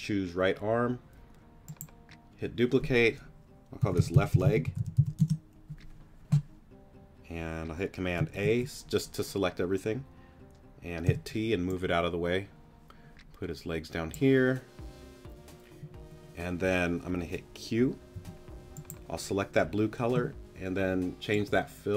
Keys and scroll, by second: 3.8-5.0 typing, 5.2 Return, 8.3 super+a, 11.0 t, 18.1 p.